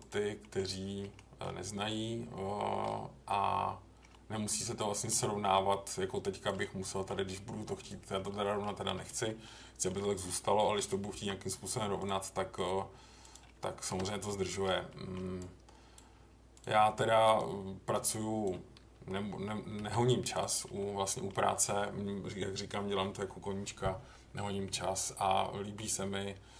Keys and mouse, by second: 0.4 middle click, 1.1 middle click, 1.9 middle click, 4.1-5.1 middle drag, 5.9 click, 6.6 middle click, 8.3 middle click, 9.0 middle click, 9.4 middle click, 11.1 k, 14.3 middle click, 14.9 middle click, 15.5 click, 16.5 click, 17.3-18.4 drag, 19.8 j, 20.8 middle click, 24.9-25.8 middle drag.